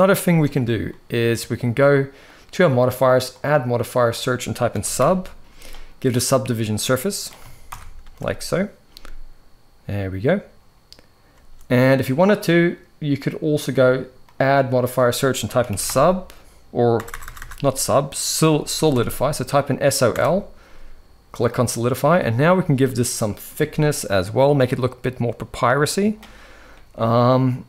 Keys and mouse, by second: 0.0 space, 0.5-2.0 middle drag, 2.0 click, 3.0-6.0 drag, 6.6-7.1 middle drag, 7.4 shift+Left, 7.7 space, 11.1 space, 12.4 click, 14.1-21.3 drag, 16.8 BackSpace, 17.0 BackSpace, 21.9 middle click, 23.7-25.8 shift+drag, 26.4-27.4 middle drag.